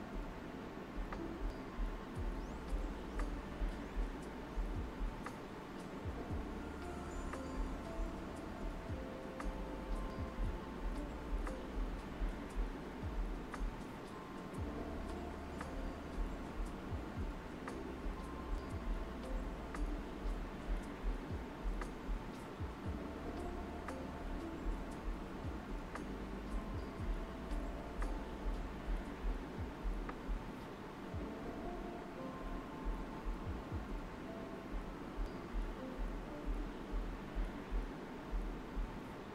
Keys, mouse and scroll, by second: 3.0 shift+click, 4.1-5.7 alt+right drag, 6.0-11.1 alt+right drag, 11.1 click, 14.3-15.6 shift+drag, 15.6 alt+right click, 17.7 alt+right click, 18.5 alt+right click, 19.4-21.5 typing, 20.3 alt+right click, 21.1 click, 22.4 click, 25.5 shift+click, 26.1 alt+right click, 26.8 alt+right click, 27.8 alt+right click, 28.9 click, 30.1 shift+click, 31.3 shift+space, 31.5 click, 31.8 space, 32.3 click, 33.0 shift+click, 34.0 alt+right click, 36.1-38.5 right drag, 38.5 click.